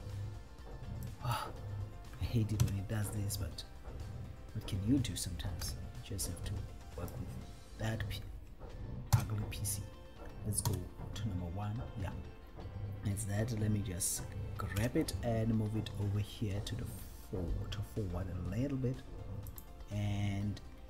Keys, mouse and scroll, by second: 1.3 click, 2.9 KP_7, 5.8 b, 9.3 KP_7, 10.9 KP_1, 14.9 g, 19.6 click.